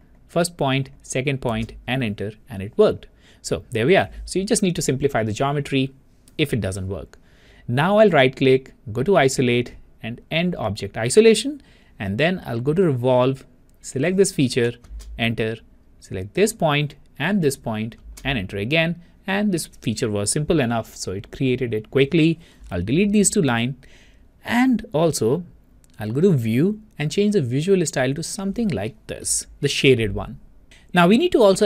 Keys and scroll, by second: 2.1 Return, 15.1 Return, 18.5 Return.